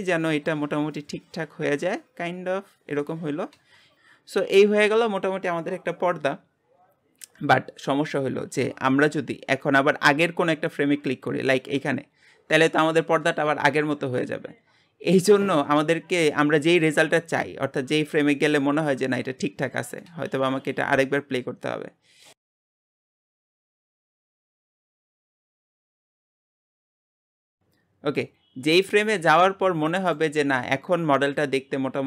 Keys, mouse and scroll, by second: 3.3 scroll up 1, 3.8 space, 3.9-11.2 middle drag, 11.2-19.9 drag, 20.1 space, 27.0 space, 28.3-32.0 middle drag.